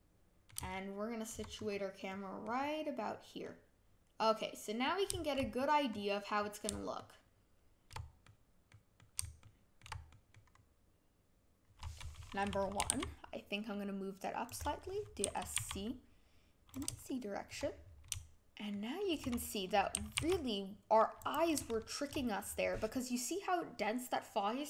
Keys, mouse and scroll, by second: 1.5 scroll up 2, 2.1 middle click, 2.5-3.1 scroll down 1, 3.4-5.5 middle drag, 5.5-5.9 scroll down 1, 5.9-6.3 scroll up 1, 6.3-6.9 scroll down 1, 6.9-10.5 shift+middle drag, 10.5-11.3 scroll up 1, 11.3 scroll down 1, 12.8 g, 15.2 s, 17.0-19.9 shift+middle drag, 19.9 s, 21.7-24.6 shift+middle drag.